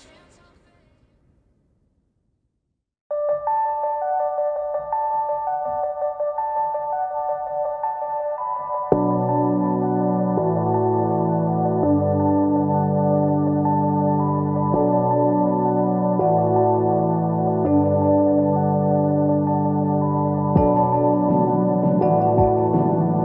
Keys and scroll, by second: 4.7 ctrl+c, 6.8 ctrl+v, 8.7 ctrl+t.